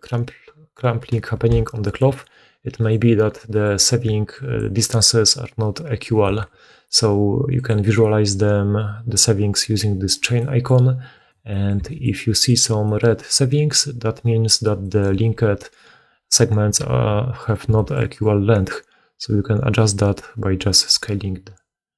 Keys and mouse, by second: 1.3 2, 2.1 right click, 2.7 right click, 3.9-5.5 d, 5.5-9.2 right drag, 6.2-7.6 middle drag, 6.2 d, 9.2-11.2 drag, 11.2-21.9 middle drag, 11.8 s, 17.6 s.